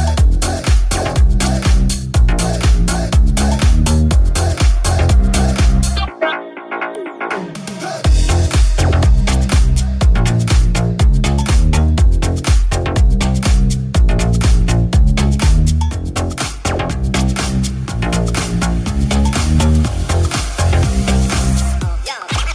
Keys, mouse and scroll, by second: 1.2 click, 1.3-7.4 drag, 5.8 right click, 8.0 shift+click, 8.2 shift+right click, 8.3 click, 9.0 click, 9.6 click, 9.9 click, 10.3-16.8 drag, 15.9 ctrl+Tab, 17.1-22.5 ctrl+drag, 17.1 ctrl+Tab.